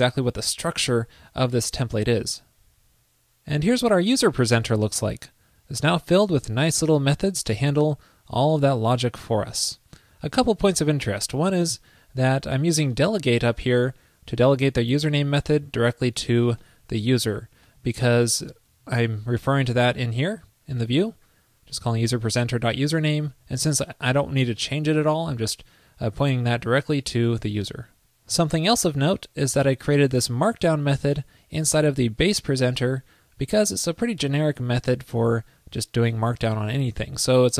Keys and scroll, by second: 18.7 alt+super+Left, 23.3 alt+super+Right.